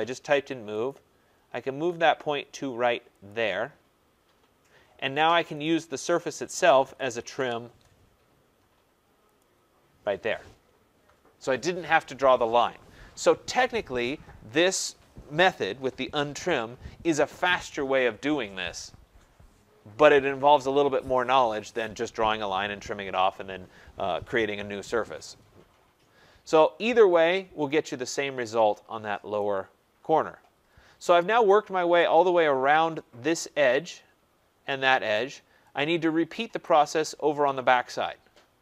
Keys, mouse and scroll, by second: 0.9 click, 3.2 click, 5.7 click, 6.6-7.7 typing, 9.4 click, 25.7 scroll, 25.9-28.3 middle drag, 25.9-27.1 scroll down 5, 27.1-28.3 scroll down 1, 28.3 scroll, 28.9 middle click, 28.9 scroll down 5, 29.3 right click, 29.7-30.4 scroll, 30.6-31.0 scroll, 31.5 right click, 31.8 scroll, 33.1 scroll, 36.2 middle click, 36.6 right click.